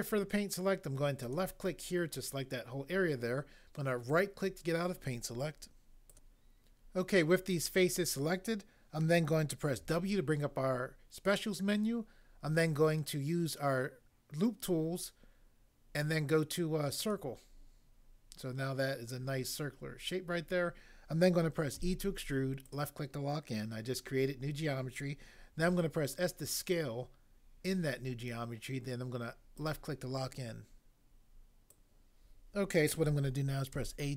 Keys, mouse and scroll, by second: 1.3 click, 4.1 right click, 6.0 click, 9.8 w, 21.8 e, 22.6 click, 25.6 s, 29.6 click, 33.7 a.